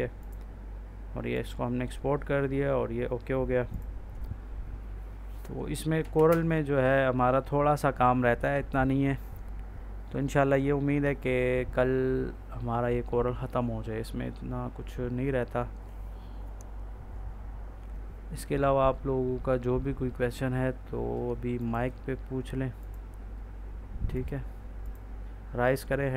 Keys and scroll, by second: 6.2 space.